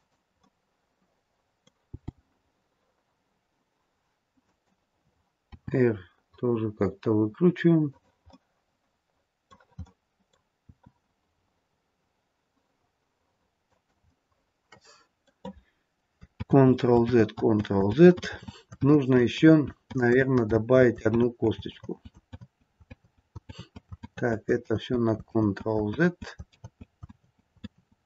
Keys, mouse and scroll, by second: 0.4 middle click, 1.9 g, 5.4 r, 8.2 middle click, 9.7 middle click, 10.6 r, 14.0 middle click, 16.5 ctrl+z, 17.1 ctrl+z, 18.0 z, 18.9 ctrl+z, 19.4 ctrl+z, 20.4 z, 21.2 ctrl+z, 21.8 ctrl+z, 22.4 ctrl+z, 22.9 ctrl+z, 23.5 ctrl+z, 24.1 ctrl+z, 24.7 ctrl+z, 25.4 ctrl+z, 26.0 ctrl+z, 26.6 ctrl+z, 27.1 ctrl+z, 27.7 ctrl+z.